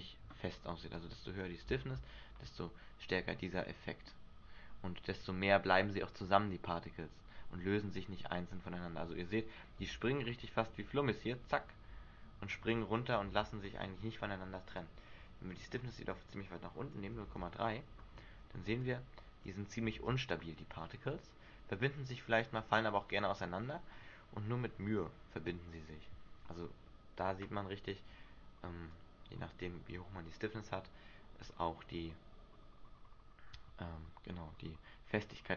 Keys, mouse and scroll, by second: 0.5 Escape, 1.1 click, 1.9 alt+a, 3.1-3.8 scroll down 2, 3.8 middle click, 9.1 Escape, 10.0 alt+a, 13.4 alt+a, 14.9 click, 17.4 alt+a, 18.5 Escape, 19.0 click, 20.0 alt+a, 28.4 Escape, 29.1 click.